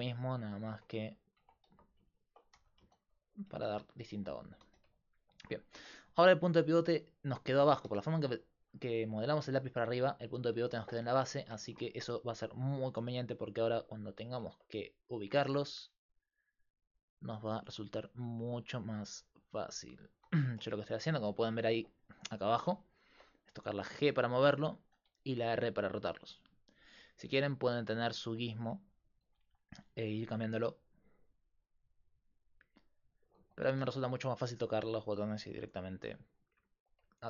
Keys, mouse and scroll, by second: 0.7 Tab, 1.4 Tab, 1.7 a, 2.6 g, 3.5 Tab, 4.7 z, 6.2 g, 7.6 g, 12.3 g, 15.8 r, 16.8-18.3 drag, 17.2 g, 18.3 g, 19.0 r, 21.2 g, 22.6-24.6 drag, 23.5 f, 24.0 g, 25.5 r, 28.2-30.0 drag, 33.7 ctrl+z, 34.0 ctrl+z, 36.9-37.2 drag.